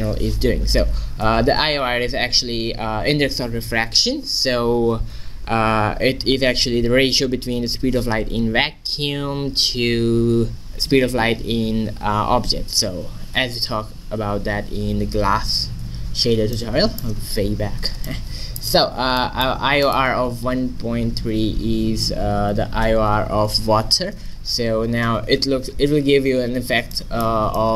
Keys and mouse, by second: 16.7 middle click, 17.1-18.6 middle drag, 19.9-21.7 drag, 25.6-27.0 middle drag.